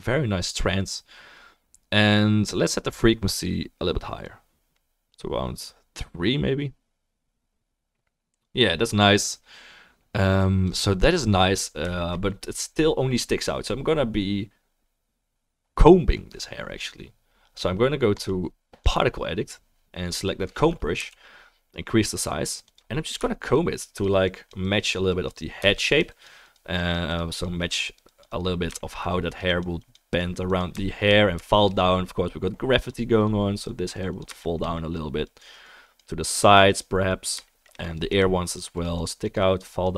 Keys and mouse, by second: 7.5-22.7 drag, 7.5-22.7 middle drag, 7.5-26.4 right drag, 21.0 f, 23.8-26.4 drag, 23.8-26.4 middle drag, 31.2-39.9 shift+drag, 31.2-39.9 shift+middle drag, 31.2-39.9 shift+right drag.